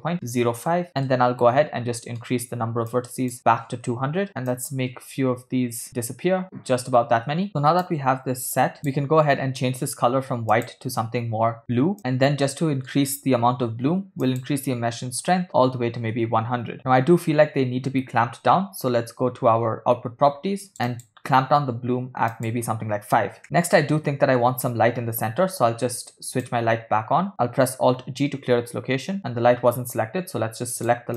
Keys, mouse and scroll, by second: 1.1-2.3 middle drag, 2.9-4.3 shift+drag, 4.0 0, 4.3 middle click, 4.3 space, 4.9 click, 8.4-9.4 drag, 10.8 click, 12.1-13.4 middle drag, 14.4-16.5 drag, 15.6 0, 21.2 click, 22.5 click, 26.8 click, 28.2 alt+g, 29.2 middle click, 29.2 click.